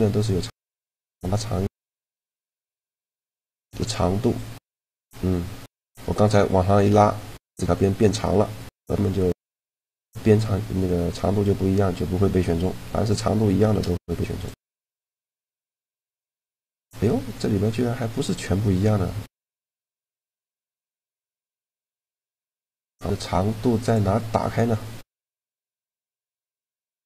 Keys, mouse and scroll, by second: 0.0-1.8 drag, 2.2-3.4 right drag, 3.0 shift+g, 3.4 click, 9.4-11.7 middle drag, 12.9 right click, 13.5 shift+g, 14.2 right click, 14.7 right click, 15.1 shift+g, 16.2 right click, 21.4-22.5 middle drag, 22.5 click, 23.5-25.4 drag, 23.7 right click.